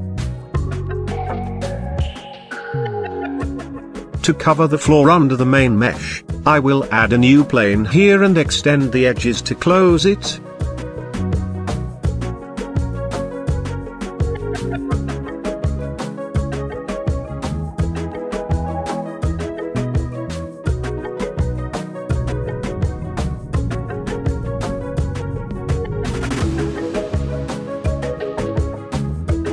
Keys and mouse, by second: 1.9 shift+middle drag, 2.4-3.0 middle drag, 4.4-5.1 middle drag, 5.1 middle click, 5.5 middle click, 6.0-6.5 middle drag, 6.9 shift+middle drag, 8.0 shift+click, 8.4 shift+a, 10.5-10.9 middle drag, 11.0 shift+middle drag, 12.4 g, 12.9 shift+z, 13.9 click, 14.4 Tab, 14.8 click, 15.5 middle click, 15.9 shift+click, 16.9 g, 17.2 y, 17.5 x, 18.3 click, 19.2 e, 19.4 x, 20.4 click, 20.9 click, 22.1 e, 22.1 y, 23.0 drag, 23.7 click, 24.1 shift+drag, 24.9 shift+click, 25.6-25.9 middle drag, 27.0 e, 27.8 y, 28.7 click, 29.2 Tab.